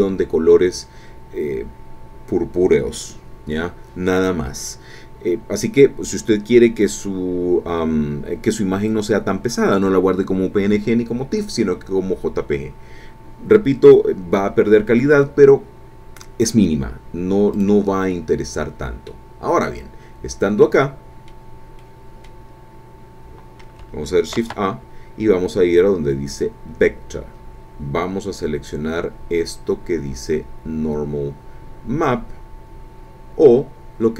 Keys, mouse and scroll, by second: 17.5 click, 19.1-21.3 middle drag, 21.3 scroll up 1, 21.8 middle click, 22.7-23.3 scroll down 2, 23.3 middle click, 24.3 shift+a.